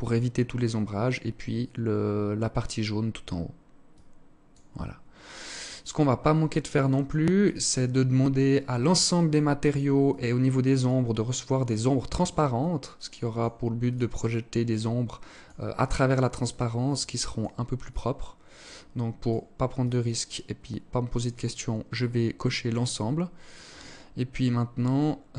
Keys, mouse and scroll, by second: 3.0 click, 4.3-4.9 scroll up 8, 5.5 click, 6.5 click, 7.1 scroll up 4, 7.9 click, 7.9 scroll up 2, 9.1 click, 10.7 click, 11.7 click, 15.1 click, 15.9 click, 17.7 click, 18.9 click, 22.5 click, 25.0 click.